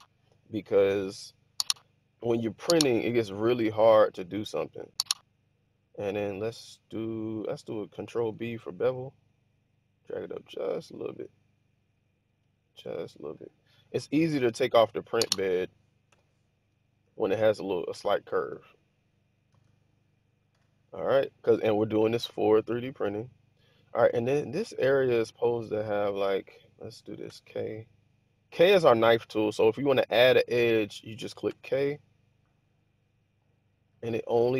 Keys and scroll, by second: 4.1 1, 8.0 ctrl+b, 15.1-16.5 typing, 17.8 typing, 19.4 alt+a, 20.5 1, 27.2 k, 30.9 Escape, 31.4 k.